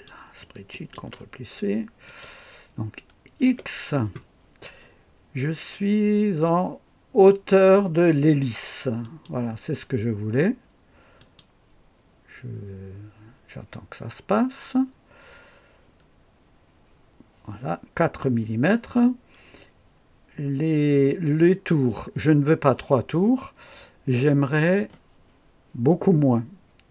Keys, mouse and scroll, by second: 0.9 ctrl+c, 2.0 click, 3.4 x, 5.9-6.5 scroll down 1, 9.0 click, 11.1 click.